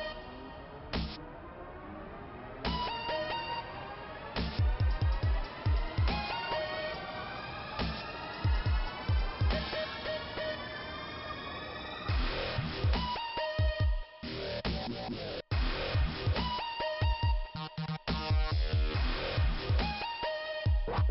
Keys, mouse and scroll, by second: 1.4 click, 10.8 middle click, 12.7-13.8 scroll up 1, 14.1 click, 14.7 click, 19.0 click.